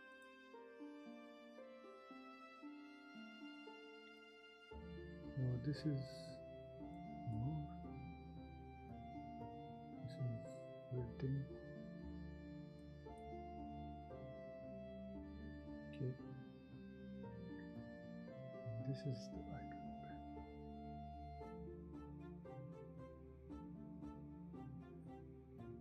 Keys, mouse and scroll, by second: 5.6 space, 14.5 ctrl+z, 16.7 ctrl+shift+z.